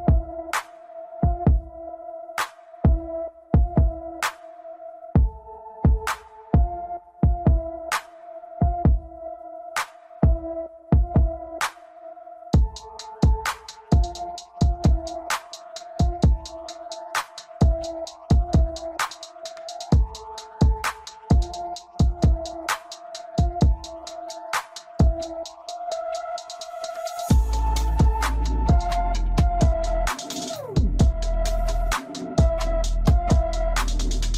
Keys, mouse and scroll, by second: 0.7-1.2 scroll up 2, 1.2-3.7 shift+middle drag, 3.7-6.8 drag, 11.1 KP_1, 12.1 Tab, 13.5 click, 14.9 click, 18.6-20.1 drag, 24.0-26.2 middle drag, 26.2-27.6 scroll up 2, 27.6-30.0 drag, 30.0 KP_1, 31.4 click, 32.2 KP_1.